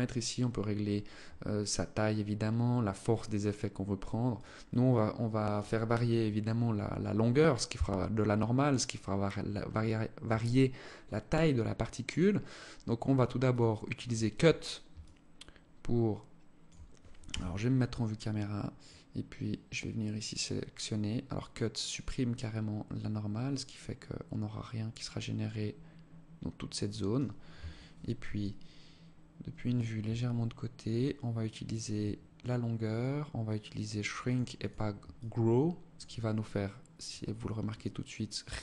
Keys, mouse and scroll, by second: 5.4 click, 11.6 click, 13.0 click, 14.4 alt+click, 16.7 KP_0, 18.3 click, 27.8 alt+click, 31.1 click, 33.7 click, 34.1 click, 34.6 alt+click, 36.0 click, 37.0 click.